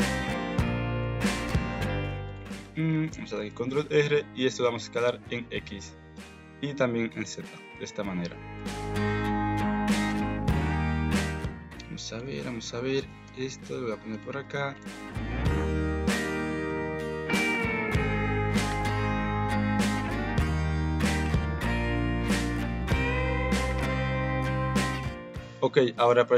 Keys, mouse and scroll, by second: 0.0 Tab, 0.5 middle click, 1.0 middle click, 1.6 click, 2.6 Tab, 3.0 ctrl+r, 3.8 middle click, 4.6 s, 6.2 s, 7.5 Tab, 7.8 middle click, 8.5 KP_1, 9.6 shift+middle click, 10.4 Tab, 11.4 alt+z, 11.8 click, 12.4 alt+z, 13.1 alt+z, 13.2 g, 14.7 click, 15.1 g, 16.3 click, 16.9 g, 17.4 click, 18.0 g, 18.7 alt+z, 18.9 Tab, 19.8 Tab, 20.2 alt+z, 20.6 click, 21.0 g, 22.7 alt+z, 22.9 Tab, 24.4 Tab, 25.0 alt+z, 25.3 KP_Decimal, 25.9 alt+z.